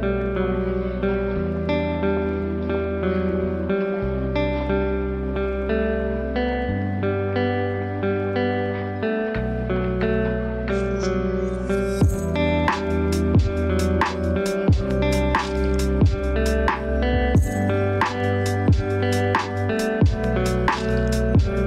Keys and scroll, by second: 0.8 ctrl+d, 4.4 ctrl+space, 10.4 ctrl+space, 12.3 ctrl+s, 13.8 ctrl+z, 14.9 ctrl+d, 21.1 ctrl+t.